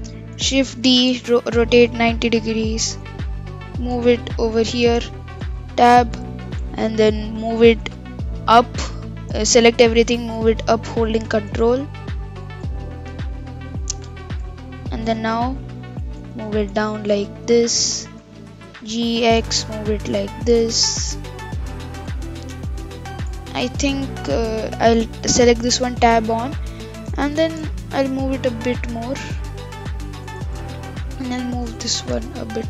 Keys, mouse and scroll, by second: 0.8 shift+d, 2.6-3.7 scroll down 3, 3.7 g, 4.8 Tab, 5.8-7.4 shift+middle drag, 7.4 g, 9.4 a, 10.1 g, 12.8-13.2 scroll up 6, 13.6-13.9 scroll up 1, 13.9 Tab, 14.6-15.1 shift+middle drag, 15.1 scroll down 2, 15.6 scroll up 2, 15.9 g, 18.5 g, 22.2 click, 23.5-24.0 shift+middle drag, 24.0-25.7 scroll up 4, 25.7 Tab, 27.1 g, 30.4 Tab, 30.8 click, 31.6 g.